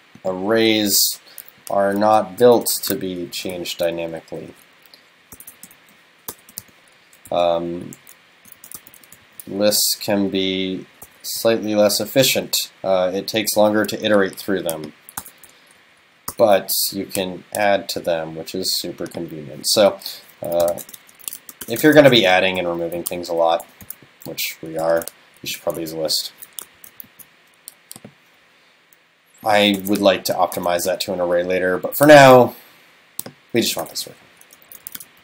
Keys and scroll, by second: 4.5 alt+Right, 7.4 alt+Left, 10.2 alt+Right, 12.3 super+Left, 25.8 super+s, 26.8 shift+super+Left, 27.1 super+c, 30.6 super+s, 34.3 alt+Left.